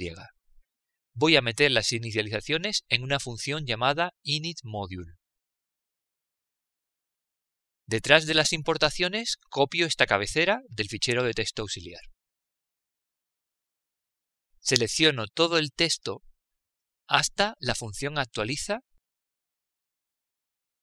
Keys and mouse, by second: 0.8 click, 13.1 ctrl+v, 15.5 click, 16.7 Left, 18.0 shift+Down.